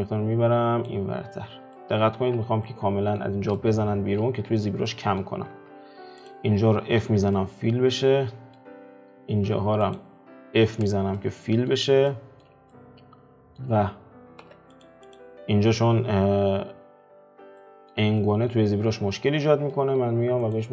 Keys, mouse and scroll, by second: 0.1 click, 1.3 alt+q, 1.8 middle click, 2.4 z, 2.7-4.5 middle drag, 4.5 alt+q, 4.9 middle click, 5.7 Tab, 7.1 f, 7.4-8.7 middle drag, 8.7-10.0 scroll down 1, 10.7 f, 11.2 middle click, 11.8-12.1 scroll down 2, 12.1-14.6 middle drag, 14.6 Tab, 14.9 click, 15.2 click, 17.2 Tab, 17.6-18.9 middle drag, 18.9 Tab, 19.2-20.7 middle drag.